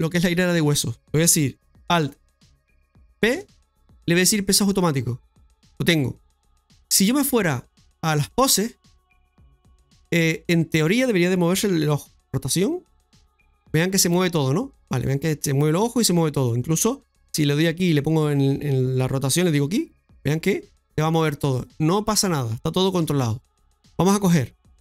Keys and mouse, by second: 3.1 ctrl+p, 7.0 click, 9.2 right click, 9.7 middle click, 17.2 shift+s, 19.6 shift+s, 20.3 r, 23.0 ctrl+z.